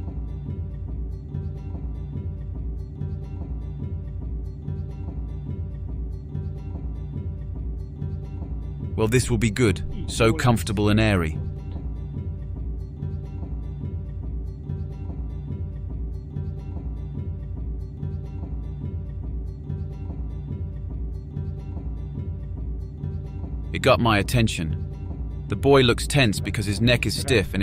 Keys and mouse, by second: 23.1 click, 24.3-25.0 drag, 26.0 click.